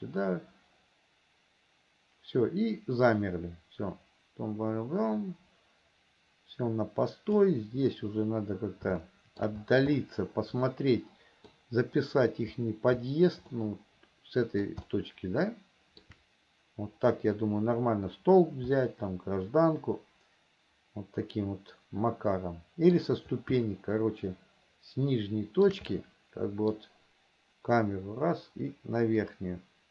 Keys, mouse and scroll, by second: 9.3 shift+middle click, 10.3-11.8 middle drag, 13.9-15.1 middle drag, 15.3-16.5 shift+middle drag, 19.1-23.5 middle drag, 23.9-26.1 shift+middle drag, 26.2 middle click, 29.6-29.9 middle drag.